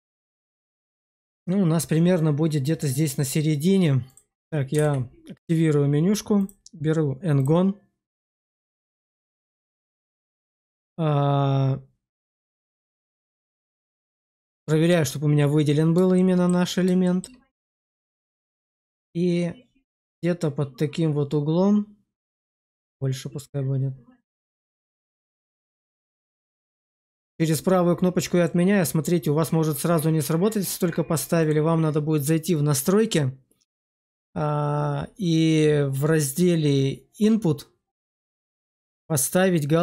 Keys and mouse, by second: 4.0 click, 4.7 alt+w, 6.3-9.1 drag, 9.7-10.3 shift+middle drag, 12.8 middle click, 13.9-14.4 shift+middle drag, 16.0-16.4 shift+middle drag, 16.9 shift+middle click, 19.9 click, 25.2 click, 25.9-26.5 shift+middle drag, 31.5-39.8 drag.